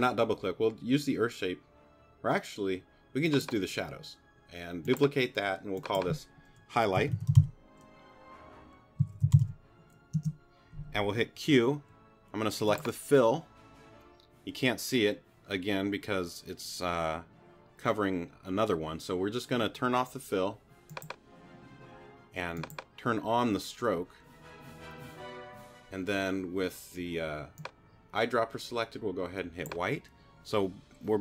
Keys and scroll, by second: 6.7-9.9 typing, 10.1 Return, 11.4 q.